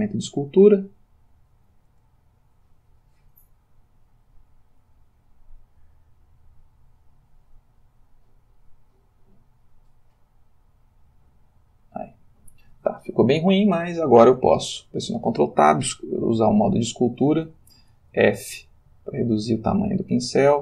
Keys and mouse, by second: 14.7 ctrl+Tab, 15.9 click, 18.1 f, 19.5-20.1 drag.